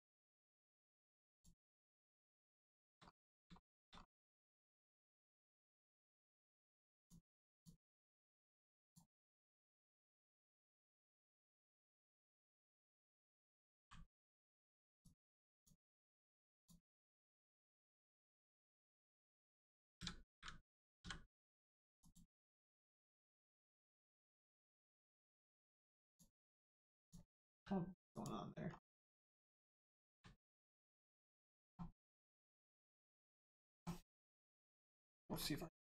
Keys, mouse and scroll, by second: 0.3 right click, 1.2 click, 2.6 shift+middle click, 3.9-4.3 scroll up 1, 4.9 middle click, 5.9-6.5 scroll up 1, 6.9 click, 10.1 click, 11.5 middle click, 12.2 shift+middle click, 13.7 g, 14.5 right click, 14.9 click, 16.9-17.5 scroll down 1, 17.5 middle click, 18.1 scroll down 1, 18.4 middle click, 20.9 m, 21.9 click, 23.0 middle click, 23.9 Tab, 24.3 middle click, 24.9 Tab, 25.2 middle click, 26.0 click, 26.3 middle click, 28.1 click, 28.9 scroll down 1, 29.3 shift+middle click, 31.0 scroll up 1, 31.9 middle click, 32.4 scroll down 1, 32.7 middle click, 34.1 middle click, 35.2 scroll down 1.